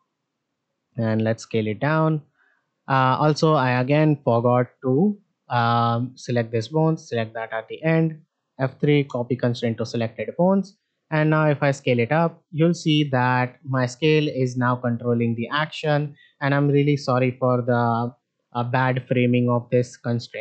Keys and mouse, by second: 3.8 click, 4.6 shift+middle drag, 5.9 shift+click, 7.8 F3, 9.6 shift+middle drag, 10.5 click, 16.5 shift+middle drag, 17.8 s.